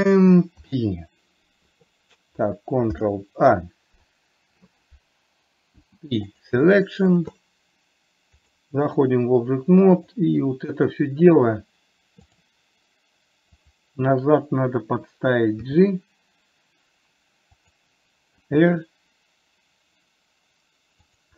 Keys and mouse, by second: 0.9 ctrl+p, 6.1 p, 8.8 click, 10.7 click, 12.7 click, 13.9 click, 15.9 g, 18.7 r.